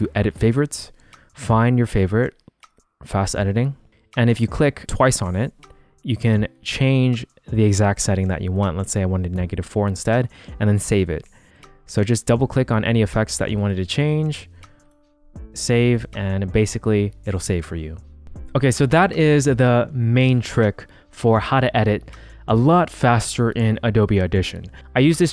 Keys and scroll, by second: 8.3-9.1 typing, 14.4-15.4 typing.